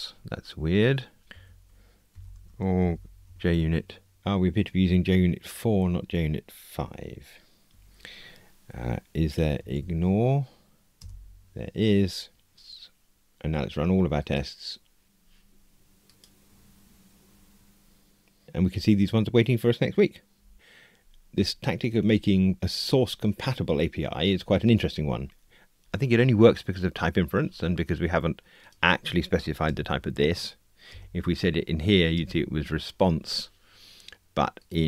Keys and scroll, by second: 11.0 Return, 14.3 typing, 29.6 alt+Return, 32.2 Return.